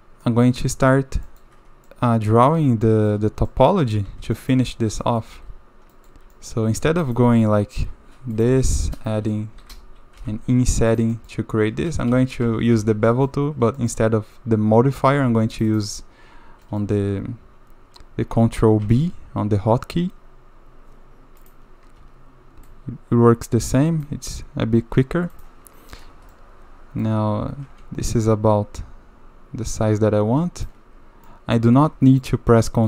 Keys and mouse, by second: 0.2 middle drag, 1.2 shift+middle drag, 1.9-3.1 middle drag, 3.5-3.9 drag, 4.4 shift+middle drag, 5.0 click, 5.3 2, 5.9 click, 6.3 shift+middle drag, 6.9 ctrl+r, 8.5 3, 8.7 click, 10.2 i, 11.1 click, 11.9 ctrl+z, 12.1 ctrl+z, 12.4 ctrl+z, 12.8 ctrl+z, 13.1 click, 13.8 click, 15.2 2, 15.3 2, 15.5 click, 15.7 click, 16.7 click, 18.8 ctrl+b, 22.7-24.1 drag, 25.4 click, 26.3 middle click, 28.1-30.7 shift+middle drag, 31.3 middle click, 32.1 shift+click.